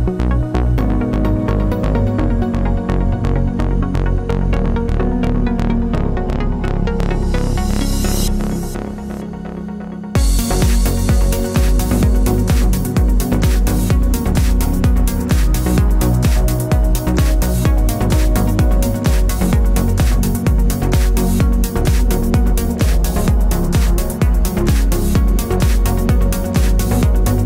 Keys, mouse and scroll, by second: 0.4 click, 0.5-1.9 middle drag, 0.9 alt+d, 2.0 click, 2.2 g, 3.2 click, 3.3-4.6 middle drag, 4.6 click, 4.9-6.1 middle drag, 6.1 click, 6.6-9.9 middle drag, 8.7 alt+d, 9.9 click, 10.0 r, 10.4 click, 10.6 g, 11.8 click, 11.8-14.9 middle drag, 13.4 r, 14.9 click, 15.3-16.7 middle drag, 15.3 g, 16.7 z, 18.2 g, 19.1 middle click, 19.8 g, 20.7 click, 20.8 middle click, 21.6 alt+d, 22.4 click, 22.5 r, 25.4 click, 25.5-27.4 middle drag.